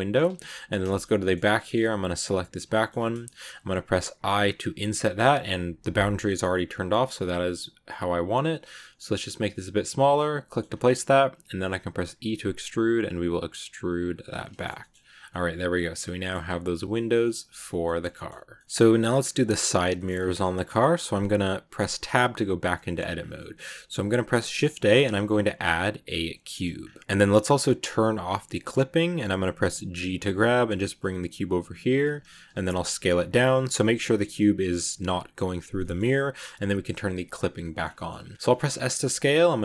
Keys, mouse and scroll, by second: 0.2 a, 0.2 scroll down 1, 0.4 middle click, 0.7 scroll up 1, 0.8 shift+middle click, 1.3 scroll up 2, 1.5 shift+middle click, 2.1 right click, 2.6 middle click, 2.8-3.1 scroll up 1, 3.1 shift+middle click, 10.0 middle click, 10.6 scroll up 2, 11.9 e, 14.0 Tab, 14.1 scroll down 1, 14.2 scroll up 1, 14.4 scroll down 1, 14.4 shift+middle click, 14.9 scroll down 1, 15.2-16.3 middle drag, 16.3-17.0 scroll up 1, 17.0-19.0 shift+middle drag, 19.0 scroll up 2, 19.6 scroll down 1, 19.8-21.7 shift+middle drag, 21.7 Tab, 22.6 middle click, 23.0 scroll down 2, 23.6 shift+a, 25.3 shift+a, 26.7 scroll down 2, 26.9-28.4 middle drag, 28.4 click, 35.7 shift+middle click, 35.9 scroll up 1, 37.2 click, 37.5 middle click, 37.8-38.2 shift+scroll up 3, 38.1 shift+middle click, 38.2 middle click, 38.5 s.